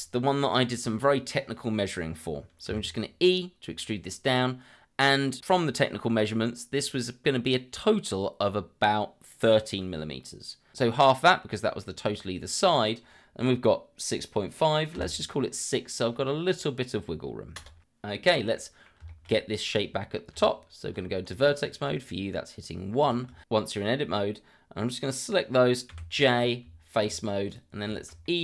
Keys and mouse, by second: 2.7 e, 14.9 KP_6, 17.6 Return, 18.5 middle drag, 19.1 shift+middle drag, 20.3 Tab, 21.6 click, 23.0 shift+click, 25.9 j, 26.6 Tab, 27.5 click, 27.9 shift+middle click, 28.2 middle drag.